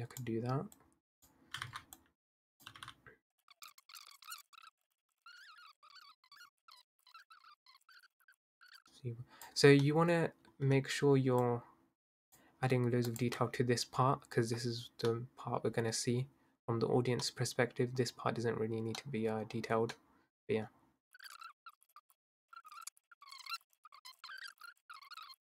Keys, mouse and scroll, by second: 0.8 click, 1.6 ctrl+z, 1.9 click, 2.7 g, 3.3 middle click, 3.4 middle click, 3.5 click, 3.8 middle click, 4.0 click, 4.2 middle click, 4.4 Tab, 4.4 middle click, 4.5 scroll up 2, 4.6 click, 4.8 middle click, 4.9 scroll down 2, 5.0 middle click, 5.2 middle click, 5.3 shift+click, 5.4 middle click, 5.5 scroll down 1, 5.7 middle click, 5.7 scroll up 1, 5.8 shift+click, 6.1 middle click, 6.1 scroll down 1, 6.2 click, 6.8 Tab, 6.8 middle click, 6.8 scroll down 2, 7.0 Tab, 7.1 click, 7.2 middle click, 7.3 shift+click, 7.7 s, 7.8 middle click, 8.0 i, 8.1 e, 8.3 Tab, 8.3 middle click, 8.6 scroll down 3, 8.6 scroll up 3, 8.7 middle click, 8.7 Tab, 8.8 click, 9.8-11.4 middle drag, 11.4 shift+click, 13.0 shift+click, 13.5-14.1 scroll down 4, 14.6-15.1 scroll down 3, 15.1-18.0 middle drag, 18.0-19.0 scroll up 1, 19.0-20.7 middle drag, 20.7-21.1 scroll up 3, 21.2 ctrl+z, 21.5 click, 21.8-22.4 scroll up 2, 22.1 middle click, 22.4 click, 22.7 middle click, 23.4 click, 23.6 s, 23.7 Tab, 23.8 scroll down 5, 23.8 middle click, 23.9 click, 24.1 middle click, 24.1 scroll up 2, 24.2 middle click, 24.5 shift+click, 24.6-25.4 typing, 24.8 middle click, 24.9 click, 25.1 middle click, 25.2 Tab.